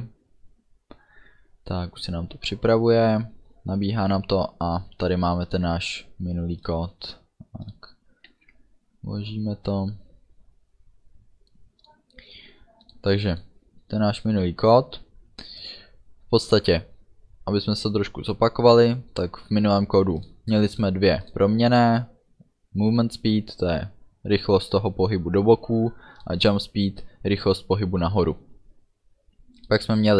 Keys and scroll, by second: 8.3 ctrl+s.